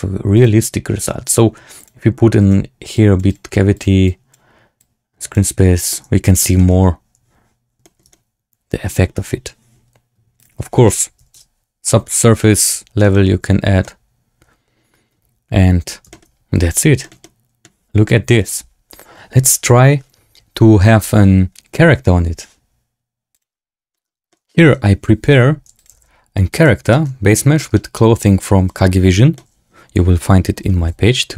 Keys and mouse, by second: 0.3-5.4 drag, 5.8-6.3 middle drag, 6.5 shift+drag, 7.7 shift+drag, 8.0-8.8 drag, 10.5-11.5 drag, 13.0 shift+click, 13.7-15.8 drag, 16.0 shift+click, 16.9 shift+click, 17.1 click, 23.9 shift+middle click, 24.2-24.5 drag, 25.1 s, 25.8 g, 26.8 shift+drag, 27.5 drag, 29.3-30.6 drag, 29.4-30.6 right drag, 30.7 g.